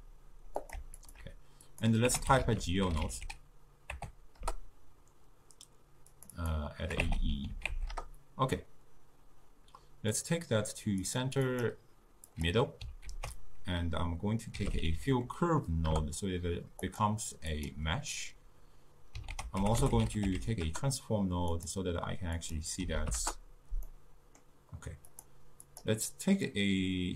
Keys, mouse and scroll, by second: 1.0 alt+shift+click, 1.7-4.9 drag, 6.2-9.2 drag, 10.2-13.1 drag, 13.1 ctrl+a, 15.0 l, 17.6 click, 19.4 ctrl+a, 22.4-24.0 drag, 24.0-25.2 middle drag, 25.2 click.